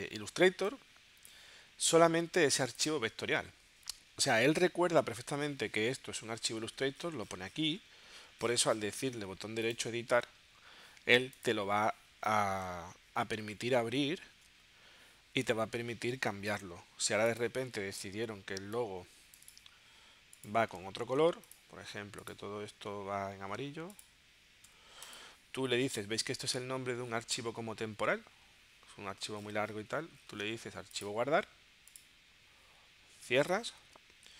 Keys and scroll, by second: 2.5 space, 4.6 super+Tab, 14.4 super+Tab, 21.0 shift+super+g, 33.8 super+w.